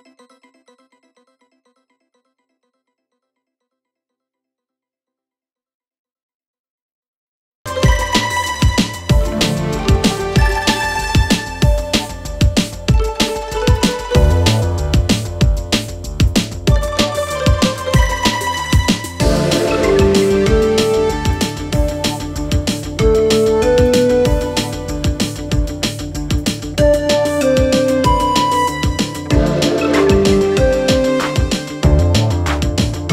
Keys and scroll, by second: 0.1 5, 0.2 Return, 29.3 1, 29.4 Return.